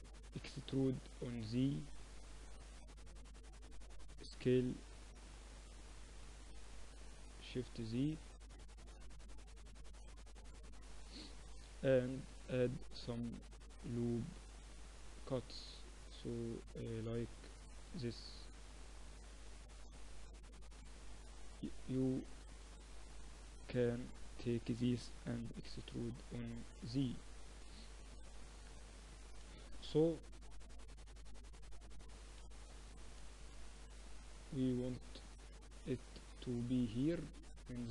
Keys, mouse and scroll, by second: 0.9 e, 4.3 s, 7.0-10.0 drag, 10.0 r, 11.1 z, 11.7-13.9 middle drag, 12.3 ctrl+r, 13.5 a, 13.9 click, 14.4 s, 15.2 a, 15.7 s, 17.2 click, 17.4 a, 18.0 s, 19.4 z, 19.8 z, 20.8 a, 22.4 a, 22.7 a, 23.6 b, 25.2 e, 27.4 middle click, 29.2 z, 31.3 a, 31.4 a, 32.4 KP_7, 34.2 middle click, 35.7 click, 36.1-37.9 middle drag, 37.3-37.9 drag.